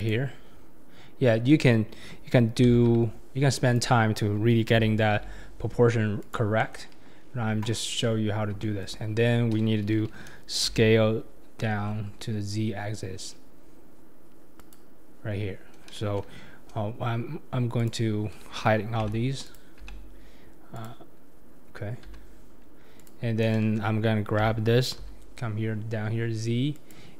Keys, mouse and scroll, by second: 7.7-8.8 shift+middle drag, 17.8 click, 19.0 h, 19.4 click, 19.8 h, 20.7 click, 22.1 h, 23.0 click, 24.4 g.